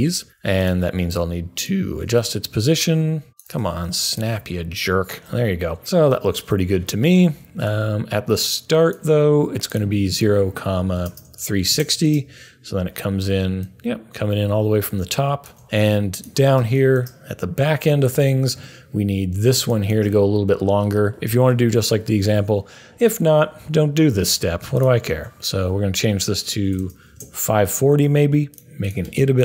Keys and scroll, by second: 10.5-11.5 typing, 22.3 u, 26.4-27.3 typing.